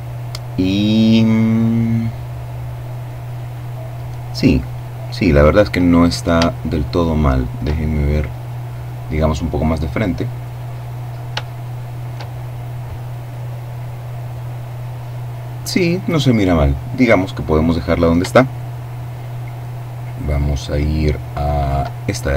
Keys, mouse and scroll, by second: 4.0-4.6 scroll up 2, 5.4-5.9 scroll down 3, 5.9-7.4 shift+middle drag, 8.0-8.5 scroll up 2, 9.2-10.7 scroll down 2, 10.7 shift+scroll down 1, 10.8-12.0 shift+middle drag, 17.9-21.5 shift+middle drag, 21.5-22.2 shift+scroll up 1.